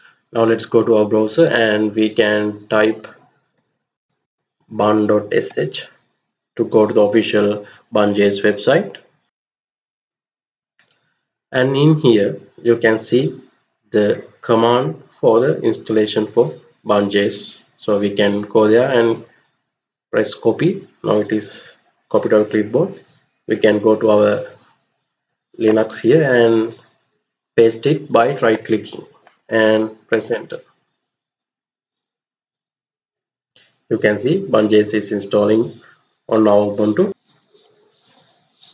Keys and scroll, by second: 3.0-4.5 typing, 5.3 Return, 22.2 alt+Tab, 30.0 Return.